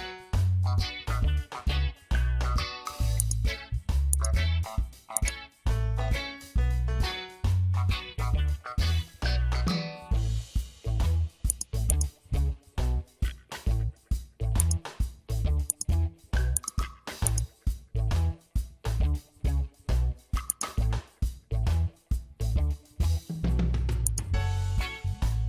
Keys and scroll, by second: 9.6 Return.